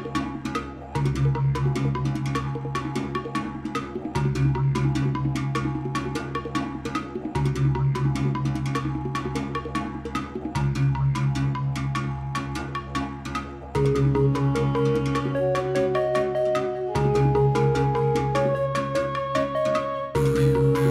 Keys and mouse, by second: 0.5 k, 1.4 x, 2.2 Page_Up, 3.1 click, 4.4-4.8 drag, 6.2 k, 7.3 x, 8.6 Page_Up, 9.3-9.9 drag, 10.5 shift+s, 11.5 ctrl+s, 12.6 space, 16.7-19.5 drag.